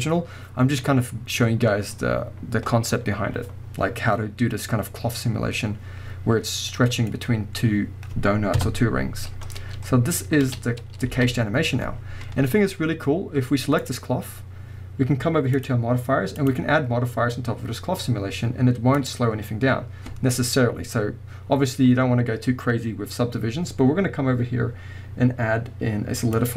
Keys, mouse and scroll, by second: 6.4-6.7 scroll down 2, 6.7-13.8 middle drag, 7.1-8.6 scroll up 2, 8.6 KP_0, 9.3-10.5 scroll down 2, 10.5 space, 10.8 scroll up 2, 11.2 a, 11.4-12.0 scroll up 2, 12.0-12.8 scroll down 2, 13.8 click, 13.9-15.4 middle drag, 15.6 click, 16.4-26.5 drag.